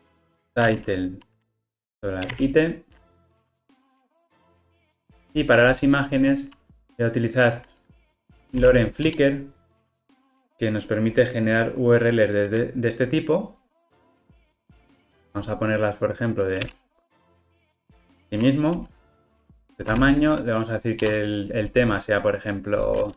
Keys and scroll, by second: 16.8 super+v, 19.9 super+z.